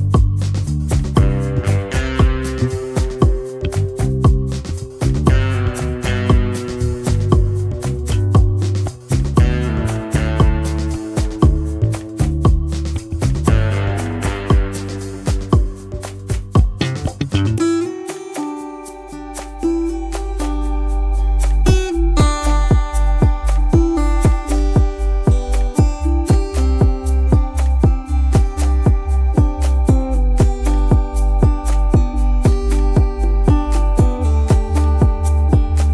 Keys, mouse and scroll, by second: 0.2 double click, 0.5 space, 1.1 alt+scroll down 1, 5.8 space, 7.6 t, 10.4 space, 15.5 ctrl+v, 17.9 double click, 22.9 alt+scroll up 1, 23.2 space, 24.6 shift+i.